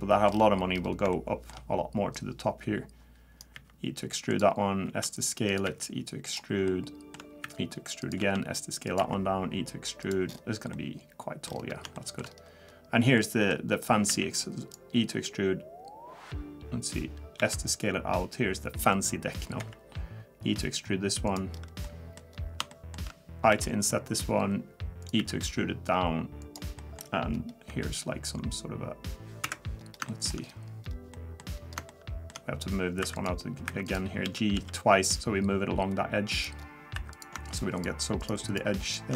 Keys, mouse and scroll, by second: 0.3-0.7 scroll up 2, 0.8 scroll up 6, 1.1 middle click, 2.1 click, 3.6 e, 4.9 s, 5.7 e, 6.7 shift+middle click, 7.4 e, 8.2 s, 9.0 e, 10.3-10.7 scroll down 6, 10.7 middle click, 11.5-12.7 scroll up 6, 12.0 shift+middle click, 12.7-13.2 scroll down 1, 13.2 middle click, 13.7-14.1 scroll down 1, 14.1 e, 17.4 s, 19.6 e, 21.5-22.1 scroll up 2, 21.8 middle click, 22.3 scroll down 1, 22.7 shift+middle click, 23.5 i, 25.2 e, 26.8 middle click, 27.3-27.7 scroll down 1, 27.7 i, 29.8 scroll down 1, 30.1 shift+middle click, 30.4-30.8 scroll up 3, 30.8-31.1 scroll down 2, 31.1 middle click, 31.5 scroll up 2, 31.9 middle click, 33.0 2, 33.1 click, 33.7 1, 33.8 click, 34.2 g, 36.6 scroll down 2, 37.0 3, 37.1 click, 37.5 shift+click, 37.8 shift+click.